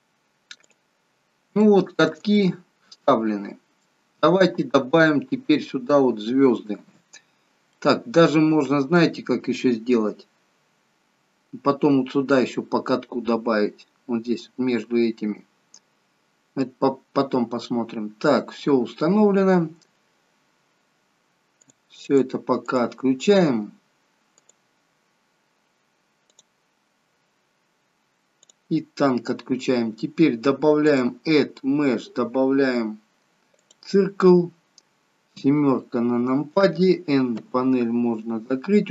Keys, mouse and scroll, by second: 0.8 click, 1.3 scroll down 1, 1.7 shift+middle click, 2.3 scroll up 1, 2.5 middle click, 3.0 middle click, 3.0 scroll up 1, 4.1 scroll down 3, 4.5 middle click, 7.8 middle click, 9.2 scroll up 2, 16.4 scroll down 3, 16.6 middle click, 21.7 click, 22.1 click, 22.9 click, 23.3 click, 24.5 click, 26.4 click, 27.0-27.4 scroll down 3, 28.5 click, 31.0 click, 35.3 KP_7, 37.5 n, 38.1-38.5 scroll up 3.